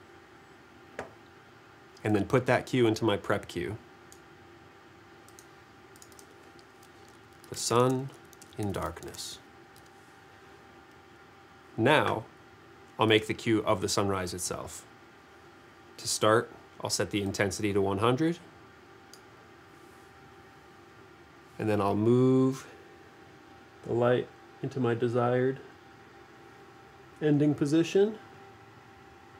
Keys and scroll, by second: 7.4-9.4 typing, 9.8 Return.